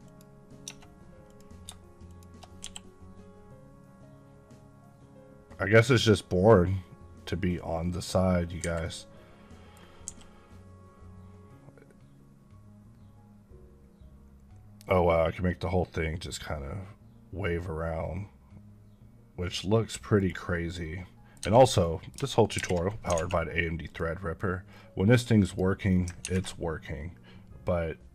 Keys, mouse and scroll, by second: 0.5 Tab, 1.2 click, 2.0 shift+click, 2.5 g, 8.5 Escape, 8.7 middle click, 9.9 g, 20.1 right click, 20.6 middle click, 21.5 Tab, 22.5 alt+h, 23.1 alt+a, 23.8 click, 24.6 scroll up 1, 25.3 click, 25.8 scroll up 1.